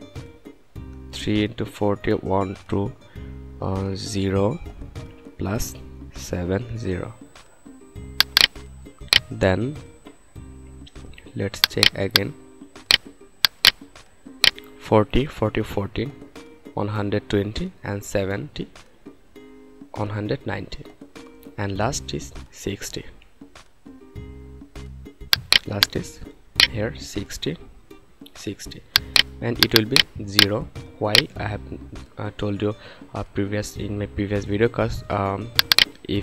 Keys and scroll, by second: 0.6 BackSpace, 2.1 1, 2.4 2, 3.8 0, 5.2 shift+=, 5.9 7, 6.5 0, 27.4 6, 27.9 0.